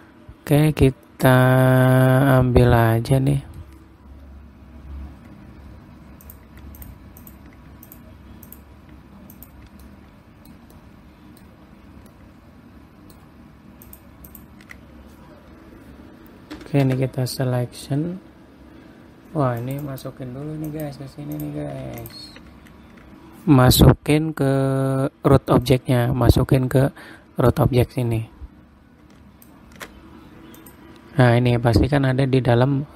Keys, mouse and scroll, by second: 0.5 middle click, 1.6 middle click, 2.3-2.8 scroll up 1, 2.8-3.3 scroll down 1, 3.3 middle click, 6.8 click, 7.3 ctrl+click, 7.7 ctrl+click, 8.4 click, 9.0 click, 9.9 ctrl+click, 10.4 ctrl+middle click, 11.2 middle click, 12.1 scroll up 3, 12.6 ctrl+middle click, 14.4 ctrl+click, 14.8 ctrl+click, 17.1 p, 20.1 click, 20.4 click, 21.9 click, 22.5 shift+click, 26.1 click, 31.1 click.